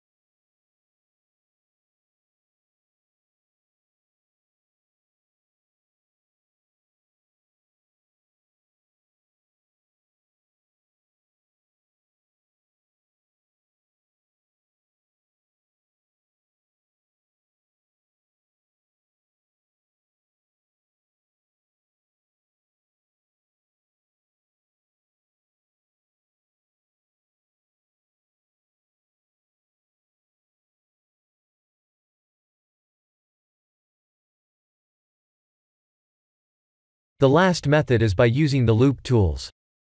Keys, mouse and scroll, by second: 1.4 scroll down 1, 1.5 click, 1.5 scroll up 1, 1.9 scroll down 1, 2.0 scroll up 1, 2.0 middle click, 4.1 middle click, 5.1 shift+middle click, 5.3 shift+middle click, 5.6 middle click, 6.2 click, 6.5 Tab, 7.0 middle click, 7.4 3, 8.4 click, 9.2 ctrl+KP_Add, 10.3 ctrl+KP_Subtract, 10.9 ctrl+KP_Add, 12.2 ctrl+KP_Subtract, 13.5 middle click, 14.4-15.0 scroll up 3, 15.0 KP_Decimal, 15.6 middle click, 18.1 click, 20.0 ctrl+KP_Add, 21.3 ctrl+KP_Subtract, 23.1 middle click, 24.7 alt+shift+click, 25.7 middle click, 27.5 middle click, 29.2 click, 30.1 click, 32.5 click, 33.0 Tab, 34.0 click, 34.5 click, 34.9-35.6 scroll down 7, 35.6 middle click, 36.3-37.0 scroll down 2, 37.0 shift+middle click, 37.9 middle click.